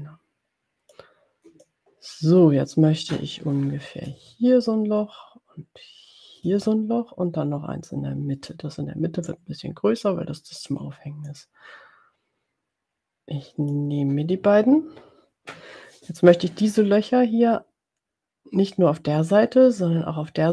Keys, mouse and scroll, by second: 1.6-8.7 ctrl+drag, 4.4 space, 6.7 space, 9.3 ctrl+click, 11.3-14.1 drag.